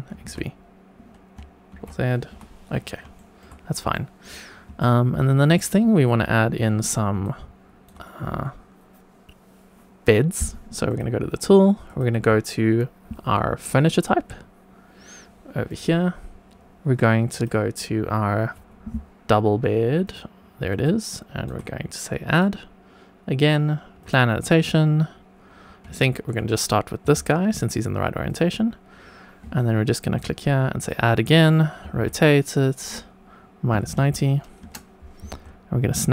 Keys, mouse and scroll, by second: 0.1 x, 1.7 ctrl+z, 2.2 Tab, 2.7-3.1 scroll down 2, 3.1 shift+middle drag, 3.9 shift+middle drag, 4.4 scroll down 1, 4.7-5.3 shift+middle drag, 7.2 shift+right click, 10.8 click, 11.8-15.8 drag, 17.3-20.1 drag, 20.8 shift+right click, 22.3 click, 24.0 click, 26.0 shift+middle drag, 27.0 g, 28.2 click, 29.5 shift+right click, 30.8 click, 31.8 r, 31.9 z, 33.7 KP_Subtract, 33.9 KP_9, 34.1 KP_0, 34.6 Return, 35.3 g.